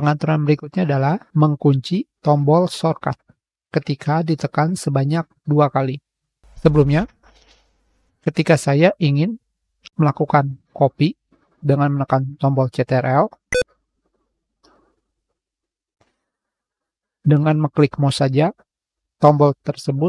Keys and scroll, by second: 18.9 z.